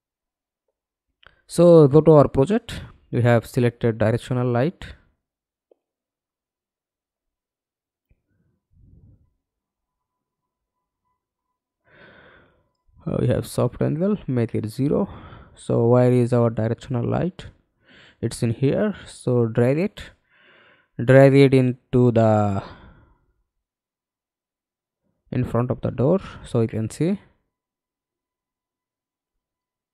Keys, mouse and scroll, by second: 0.3 middle click, 4.6 BackSpace, 5.6 scroll down 1, 7.3 alt+click, 15.0-15.5 scroll down 2, 16.4 middle click, 16.8 f, 17.7 alt+click, 18.5 alt+right click, 19.3 alt+middle click, 20.1-22.1 scroll down 4, 22.1 scroll down 2, 22.6 alt+middle click, 28.2 f, 29.1 alt+click.